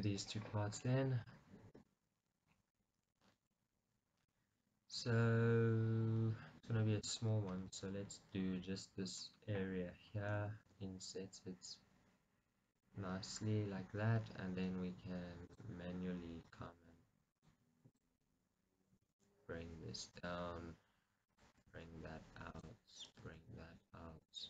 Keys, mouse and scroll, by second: 0.0 middle click, 1.8 KP_Decimal, 2.5-2.9 scroll down 1, 2.9 middle click, 4.3-6.4 scroll up 1, 10.8 i, 13.2-15.6 scroll up 2, 15.6-16.6 drag, 17.4 shift+click, 18.0-19.1 shift+drag, 19.1 g, 20.3 click, 21.4 click, 21.6 g, 23.1 click, 23.2 g, 24.3 click.